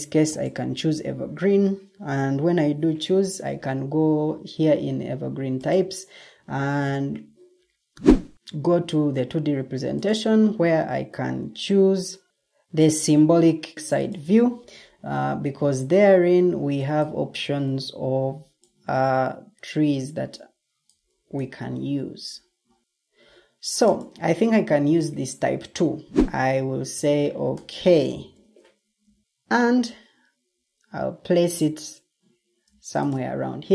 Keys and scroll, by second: 0.0-0.8 typing.